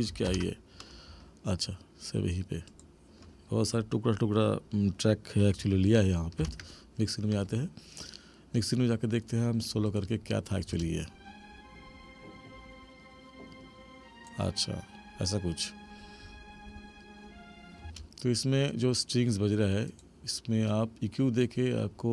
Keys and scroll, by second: 0.3 ctrl+=, 6.4 ctrl+=, 10.7 space, 17.8 space.